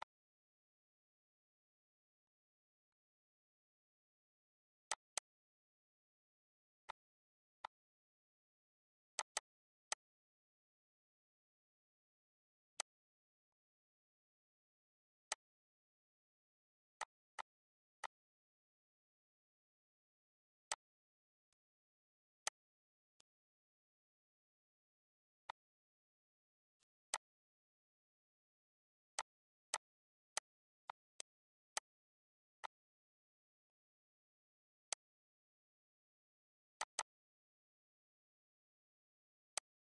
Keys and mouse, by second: 2.1 click, 2.9 click, 3.6 ctrl+s, 4.8 click, 6.8 click, 7.6 click, 9.1 click, 12.7 click, 13.4 click, 15.2 click, 16.9 click, 17.9 click, 20.6 shift+click, 21.4 click, 22.4 click, 23.1 click, 23.5 ctrl+s, 25.4 click, 26.7 click, 29.1 click, 30.3 click, 31.7 click, 32.5 click, 33.5 click, 34.8 click, 36.7 click, 37.8 ctrl+s, 38.0 ctrl+s, 39.5 click.